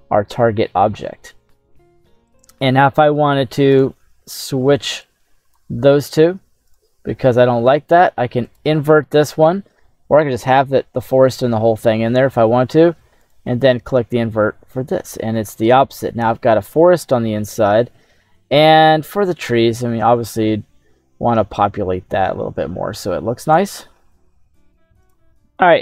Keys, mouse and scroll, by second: 2.4 click, 3.2-3.8 scroll down 1, 3.8 right click, 3.8-4.1 scroll down 1, 5.0 click, 5.8 scroll up 2, 6.7 right click, 7.2-8.0 scroll down 2, 8.5 click, 9.0 middle click, 11.4 middle click, 13.3 click, 13.9 scroll down 1, 14.7 scroll up 1, 15.4 scroll down 1, 18.4 middle click, 19.3-20.3 scroll up 1, 20.3-23.6 drag, 20.3 scroll up 1.